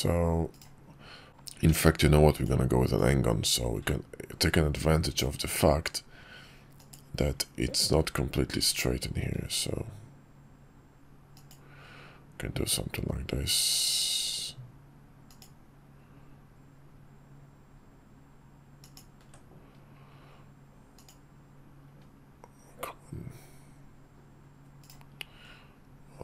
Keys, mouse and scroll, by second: 1.2 drag, 1.4 d, 2.7-4.9 drag, 26.0-26.2 drag.